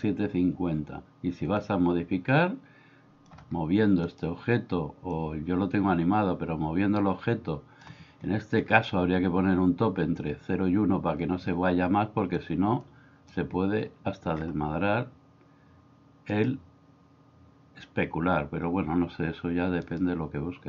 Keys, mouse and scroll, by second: 1.6-3.3 drag, 5.2-7.9 drag, 12.4-13.3 drag.